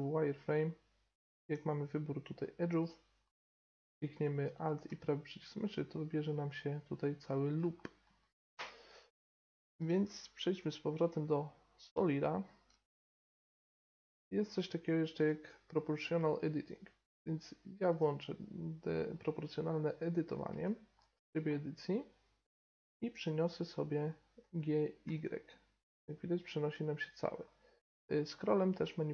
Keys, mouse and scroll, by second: 1.2-3.0 drag, 2.8-6.3 right drag, 3.2-5.9 middle drag, 6.3 middle click, 7.7-12.2 middle drag, 10.0 z, 15.1-16.9 drag, 19.1-23.1 middle drag, 23.1 f, 24.3 g.